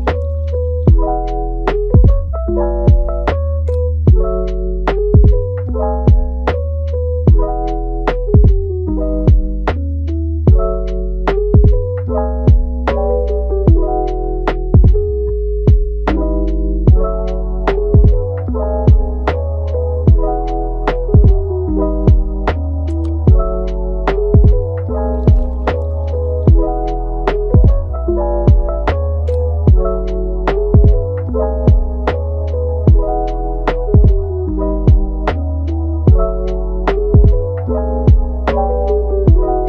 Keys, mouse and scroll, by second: 0.3 scroll up 1, 0.4-0.9 middle drag, 0.9 g, 2.1-2.9 middle drag, 2.9 g, 3.6-4.9 middle drag, 4.9 KP_1, 5.9 Tab, 6.5-7.3 middle drag, 7.3 click, 7.9-9.2 middle drag, 9.2 scroll up 4, 9.8 scroll down 1, 10.1-11.2 middle drag, 11.2 g, 12.0 middle click, 12.7 g, 13.5 middle click, 13.8 scroll down 4, 14.1-15.2 middle drag, 15.2 click, 15.9 click, 16.1 g, 17.1 click, 17.4 g, 18.1 click, 18.4 g, 19.8-20.5 middle drag, 20.5 scroll up 1, 20.7-22.2 middle drag, 22.2 KP_1, 22.6-23.1 scroll up 4, 23.1-23.8 shift+middle drag, 23.8 click, 24.2 g, 25.2 click, 25.5 g, 25.9 drag, 26.1 g, 27.0 drag, 27.3 g, 29.8 click, 30.2 g, 31.2 g, 32.8 Tab, 33.3 shift+d, 34.5 r.